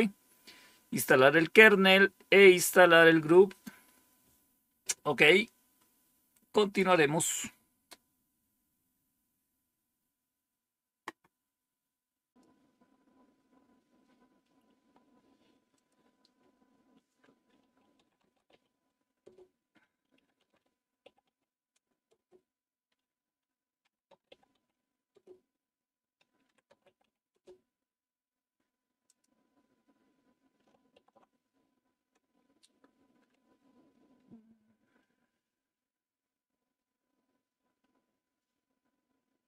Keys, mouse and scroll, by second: 12.2 click, 15.6 click, 17.6-18.9 typing, 19.1 Return, 20.0-22.0 typing, 23.5-25.0 typing, 26.1-27.4 typing, 28.9 click, 30.8 super+w, 39.4 click.